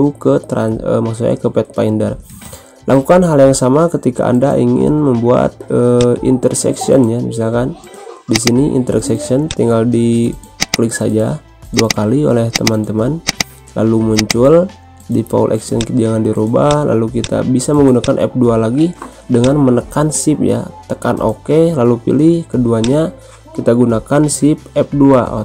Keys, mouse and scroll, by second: 3.6 ctrl+F2, 3.8 ctrl+z, 5.9 click, 8.3 click, 22.7 click.